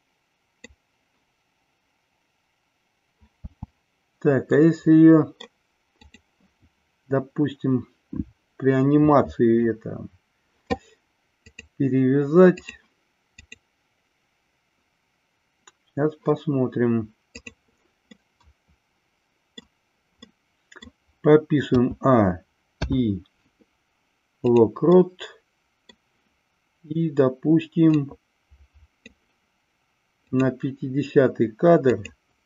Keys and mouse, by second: 3.3 space, 4.5-5.3 middle drag, 11.6-12.7 drag, 13.3-15.1 drag, 17.3 click, 18.1-19.6 middle drag, 20.2 middle click, 21.7 a, 22.7 i, 24.8-25.9 middle drag, 27.8-29.1 drag, 30.2 click, 31.8-32.4 drag.